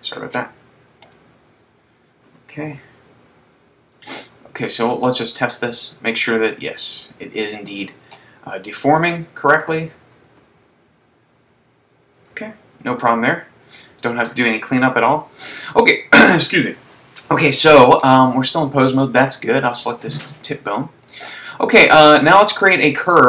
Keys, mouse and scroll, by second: 1.3 right click, 3.3 ctrl+Tab, 4.8 r, 8.0 click, 9.1 super+z, 9.8 right click, 10.7 r, 12.3 click, 13.1 super+z, 19.3 right click, 21.2 click.